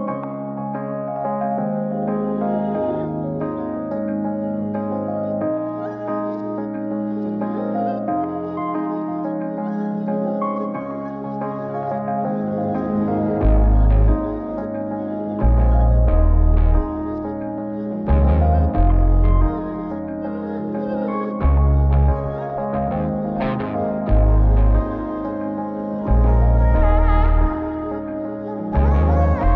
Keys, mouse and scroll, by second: 2.5 p, 14.3 alt+p, 15.9 click, 19.1 click, 20.0-21.2 drag, 22.1-24.2 drag, 24.9 click, 26.4 click, 27.1 click.